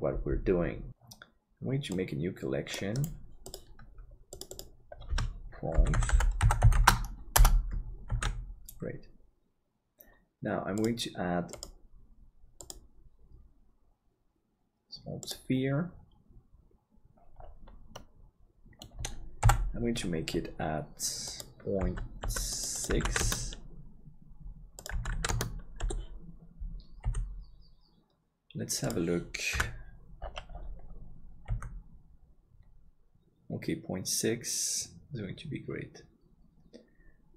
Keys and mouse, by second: 0.5 ctrl+s, 5.3-15.3 shift+drag, 8.3 ctrl+s, 18.0-19.6 middle drag, 19.4 n, 22.5-25.8 drag, 25.8 KP_7, 27.0 g, 29.5 KP_Decimal, 31.5 g.